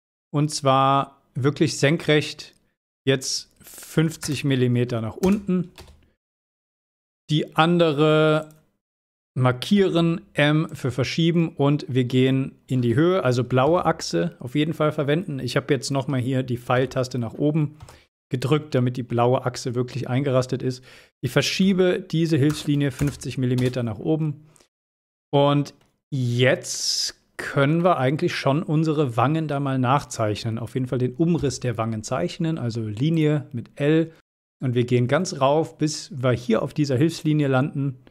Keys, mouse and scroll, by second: 0.1 click, 5.9 space, 6.5-7.1 shift+middle click, 7.5 scroll up 1, 8.5 click, 9.9 m, 10.8 click, 13.8 Up, 23.7 space, 24.2 scroll down 1, 24.8-25.9 middle click, 27.9-28.8 middle drag, 31.5 l, 33.3 click, 37.2 click, 37.6 scroll down 1.